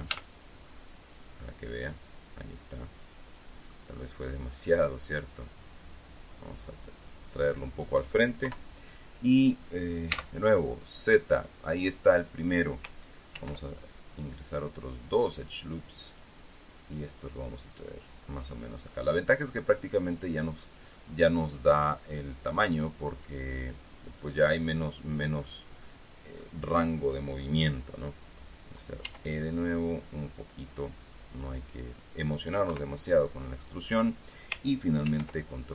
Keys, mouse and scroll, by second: 0.7 z, 1.3-4.4 middle drag, 4.6 middle click, 6.2-8.2 drag, 9.0 KP_3, 10.7 z, 13.9 ctrl+r, 16.6 click, 20.7 click, 23.7 click, 24.0 middle click, 25.6 right click, 26.0-27.1 middle drag, 29.6 e, 32.4 click, 33.2 KP_3, 35.6 ctrl+r.